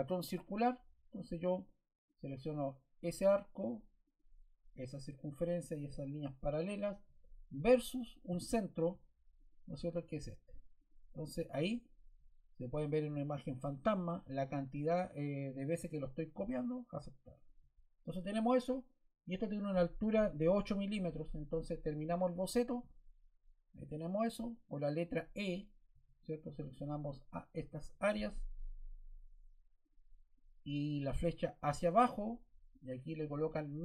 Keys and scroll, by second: 25.9 e.